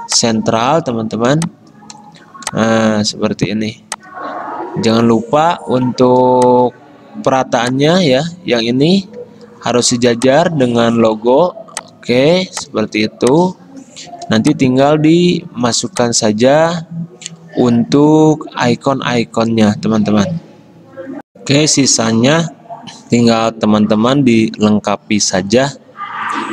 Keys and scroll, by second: 9.3 ctrl+g, 21.3 F9.